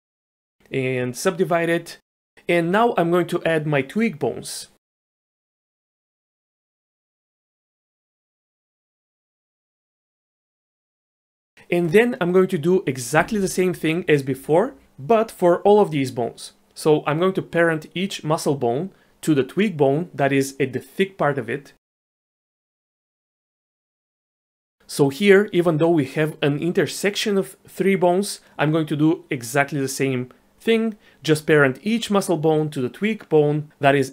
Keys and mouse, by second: 1.4-1.8 drag, 2.1 middle click, 5.7-9.0 typing, 6.0 click, 10.1 shift+d, 10.7 shift+d, 16.8-17.2 middle drag, 17.2 click, 21.8 ctrl+p, 22.5 click, 22.8 shift+click, 23.2 ctrl+p, 24.4 ctrl+p, 25.2 click.